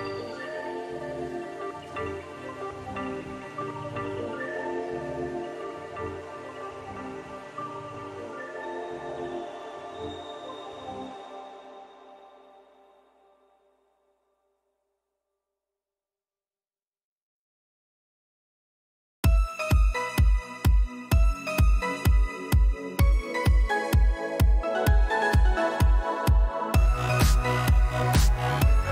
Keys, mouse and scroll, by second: 0.1-1.5 drag, 2.7 click, 3.9 shift+click, 4.4 click, 5.5 click, 5.9 shift+click, 7.4 click, 10.7 click, 13.9-14.7 drag, 15.5-16.6 drag, 19.0 click, 19.8-22.0 drag, 22.6-23.6 drag, 24.7-26.5 drag, 27.1-28.9 typing.